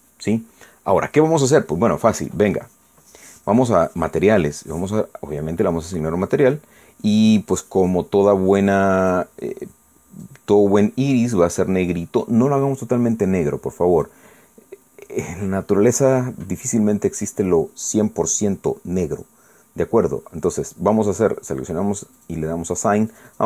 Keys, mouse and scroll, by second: 5.3 click, 7.3 click, 10.0 click, 11.2-15.2 drag, 17.6 click, 23.2 click.